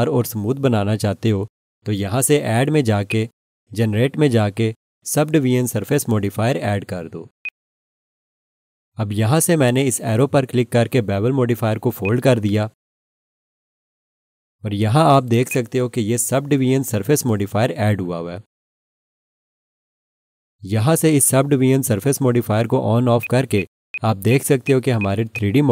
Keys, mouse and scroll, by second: 3.1 click, 7.4 click, 14.7 click, 15.5 click, 23.2 click, 23.5 double click.